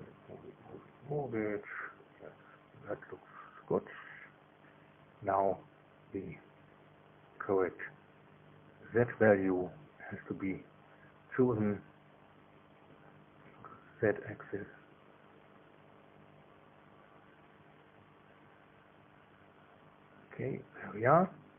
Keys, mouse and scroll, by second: 0.0-0.6 scroll up 1, 1.3-1.9 scroll up 2, 5.8 click, 6.4 click, 9.2 KP_1, 12.9 click, 15.0 click, 15.5 scroll up 1, 16.0-16.6 scroll up 2, 16.6 scroll down 1, 20.6 scroll up 1.